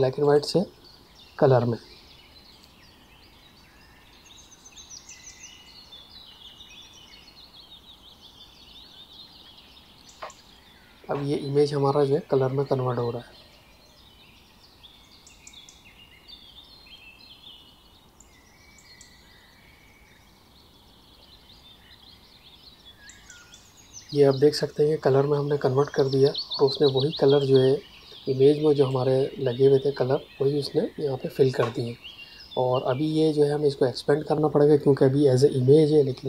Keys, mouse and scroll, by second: 0.2 click, 27.3 click.